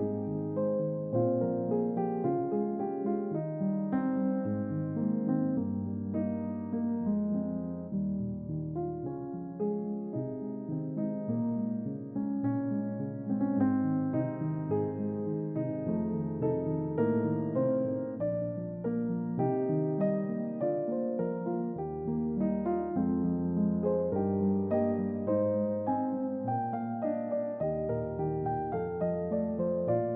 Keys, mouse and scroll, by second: 0.0-0.5 ctrl+middle drag, 1.5 ctrl+middle click, 2.4 click, 3.8-9.3 drag, 10.0-14.1 drag, 14.5-15.5 middle drag, 15.7 ctrl+middle click, 16.3-17.0 ctrl+middle drag, 18.4 click, 19.2-28.7 drag.